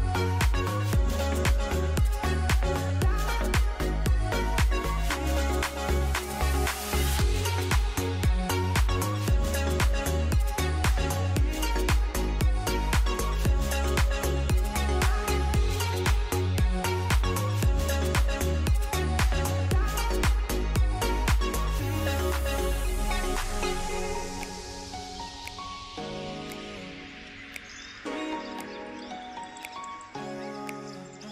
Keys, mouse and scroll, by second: 9.3 s.